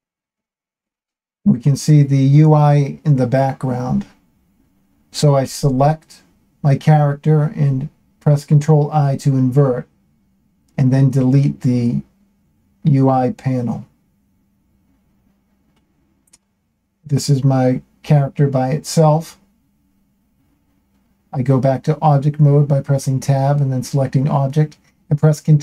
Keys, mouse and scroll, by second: 0.1-1.2 drag, 2.5 ctrl+l, 3.7-5.0 scroll down 5, 5.5 ctrl+i, 7.6 Delete, 9.6 a, 13.2-14.5 drag, 15.5-17.0 shift+middle drag, 19.0 Tab, 22.9 ctrl+2, 25.5-25.6 drag.